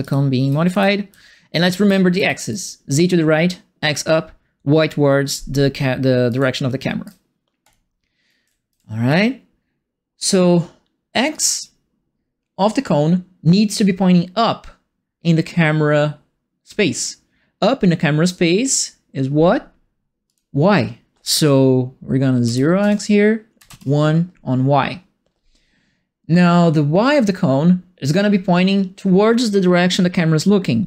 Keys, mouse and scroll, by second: 0.0-2.1 typing, 6.2 right click, 6.3 a, 7.6 click, 8.1-8.9 typing, 8.2 right click, 11.3 click, 20.2 click, 22.4 KP_0, 22.8 Tab, 23.5 KP_1.